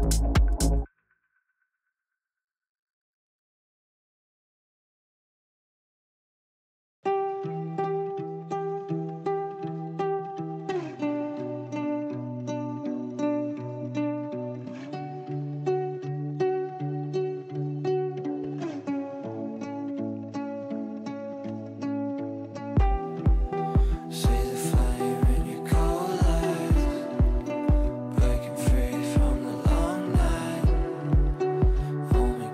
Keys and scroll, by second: 11.0 Delete.